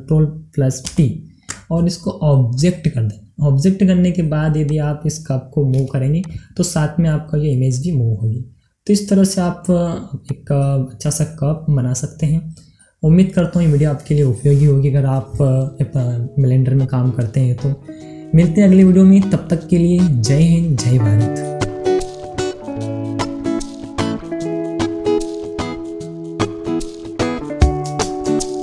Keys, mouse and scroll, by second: 2.9 ctrl+p, 4.6 click, 7.8 g, 10.3 click, 11.1-13.4 middle drag, 13.4-14.9 drag, 14.9-17.7 middle drag, 17.7 scroll up 1, 19.8-25.8 middle drag.